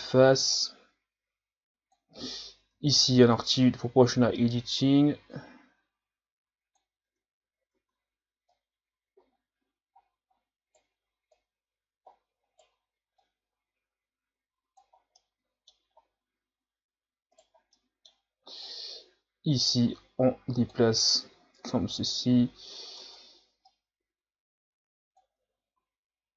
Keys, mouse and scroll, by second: 0.5-2.7 drag, 2.7 o, 3.3-6.4 drag, 7.0 Tab, 7.7 Tab, 8.5 right click, 11.3 right click, 13.2-14.9 drag, 14.9 scroll down 3, 15.2 middle click, 15.9 scroll up 4, 17.3 right click, 17.7 middle click, 18.6-21.3 drag, 21.3 KP_1, 21.6 Tab, 22.3-23.0 scroll down 1, 23.0 Tab, 23.7-25.3 drag, 25.3 Tab, 25.8 a, 26.1-26.3 middle drag, 26.1-26.3 scroll down 1.